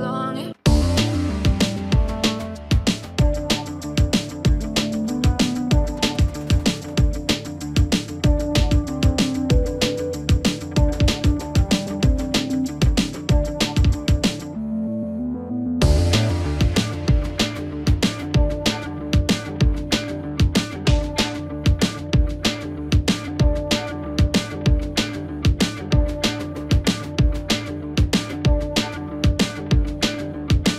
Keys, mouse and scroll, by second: 4.9 ctrl+shift+d, 5.8 click, 7.7 space, 10.5 click, 10.7-12.7 drag, 16.2 click, 20.0 click, 21.4 u, 22.6-30.7 drag.